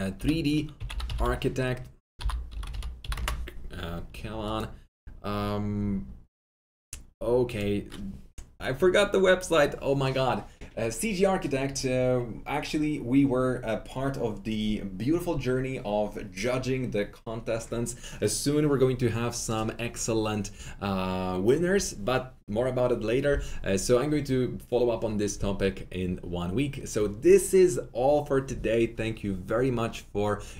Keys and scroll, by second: 0.1-3.4 typing.